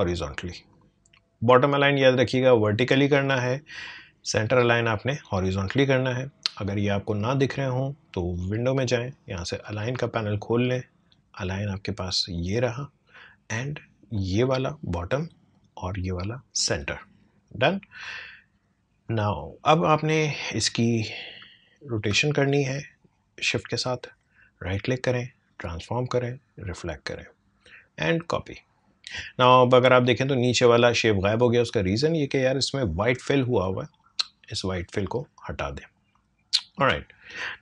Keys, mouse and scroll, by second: 8.4 click, 15.1 click, 19.0-24.1 drag, 24.1 right click, 25.6-28.1 drag, 29.4-29.8 alt+scroll up 1, 31.5-34.5 drag, 36.1 click, 36.7 space.